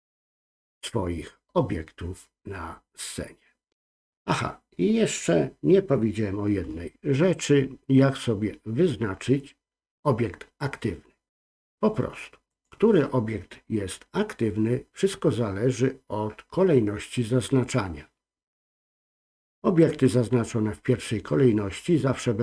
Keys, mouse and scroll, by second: 1.8 scroll up 1, 2.5-5.5 scroll down 1, 12.5 click.